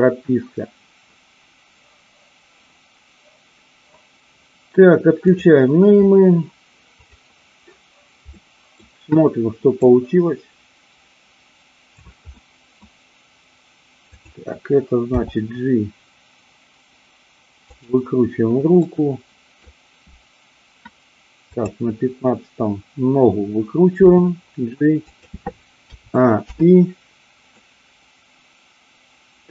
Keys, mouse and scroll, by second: 7.0 click, 8.4 middle click, 9.9-12.0 drag, 12.2-12.6 middle drag, 15.1 g, 17.8 click, 18.8 scroll up 1, 18.9 middle click, 24.0 g, 25.1 click, 25.9 a, 26.4 i, 27.6-29.5 middle drag.